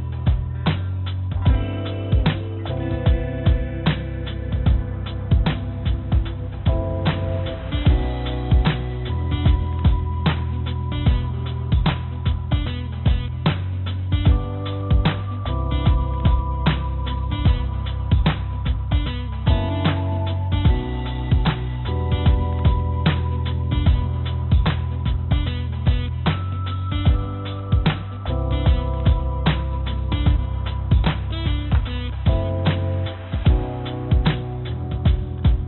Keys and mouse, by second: 10.5 g, 19.1 1, 20.1 click, 20.6 1, 21.3 e, 27.7 s, 29.5 f, 33.2 ctrl+z, 33.4 ctrl+z, 33.7 ctrl+z, 34.3 ctrl+z, 35.1 g.